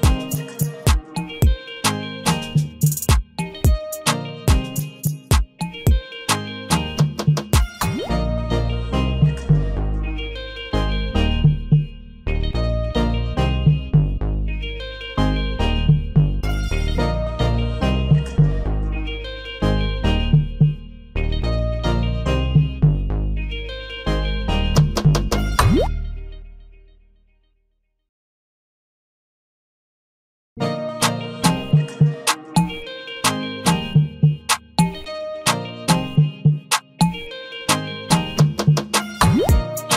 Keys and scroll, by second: 0.8 ctrl+t, 10.5 ctrl+j, 19.3 ctrl+g, 21.5 ctrl+j, 38.2 ctrl+j.